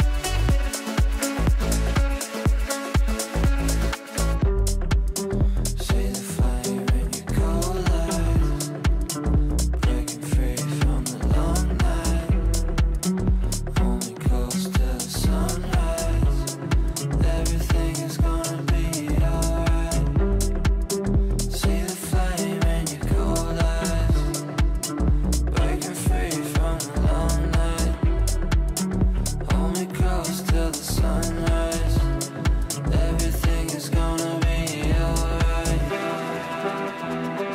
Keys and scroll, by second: 10.4 g, 10.8 g, 23.8 shift+F2, 24.3 Right, 25.1 F3, 27.0 Left, 31.4 g, 35.0 g.